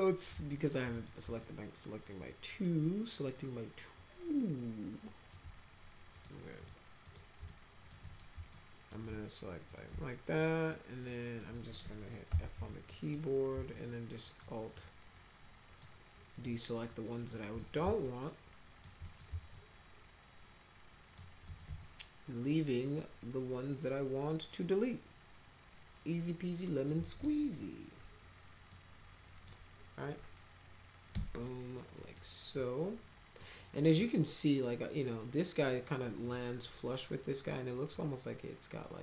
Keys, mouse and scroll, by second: 0.5 alt+middle click, 0.9 click, 1.4-5.3 alt+middle drag, 6.1 click, 6.6 click, 7.0 click, 7.5 alt+middle click, 8.0 middle click, 8.5 alt+middle click, 9.7 ctrl+click, 10.4-10.7 alt+middle drag, 11.1 alt+middle click, 11.5 middle click, 12.3 f, 12.6 z, 12.9 middle click, 13.7 alt+click, 14.7-15.8 alt+drag, 16.4 alt+click, 17.6 middle click, 18.1 alt+click, 19.0 middle click, 19.6-21.1 alt+drag, 21.5 middle click, 21.8-26.9 alt+middle drag, 27.0 middle click, 28.7 middle click, 31.1 Delete, 32.0 middle click, 33.4 middle click.